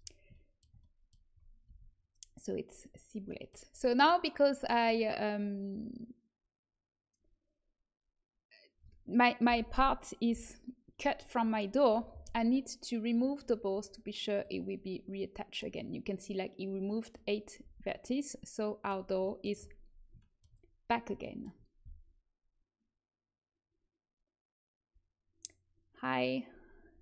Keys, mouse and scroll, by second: 1.6 a, 9.4 l, 10.3 g, 11.8 a, 12.2 a, 13.1-16.0 drag, 17.6 a, 21.2-25.7 middle drag.